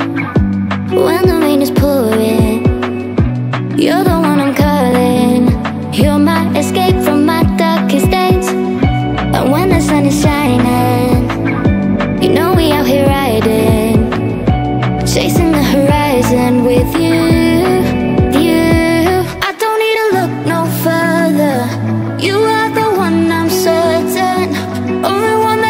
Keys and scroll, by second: 14.8 Down.